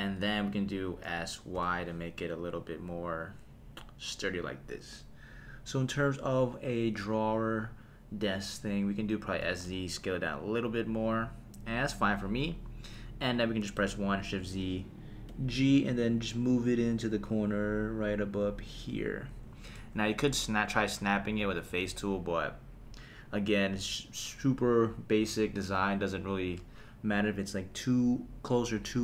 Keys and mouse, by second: 1.0 s, 1.5 y, 4.3 click, 9.4 s, 9.6 z, 11.0 click, 13.0 KP_1, 14.2 shift+z, 15.3 g, 18.7 click, 19.3 Tab, 19.8 Tab, 21.7 shift+z, 24.7 middle click.